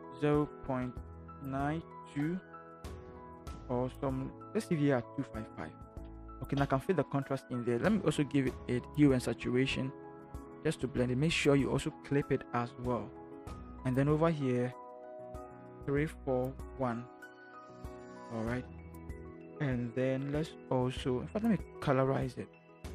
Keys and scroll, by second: 0.3 0, 2.1 2, 15.8 3, 16.1 4, 16.5 1.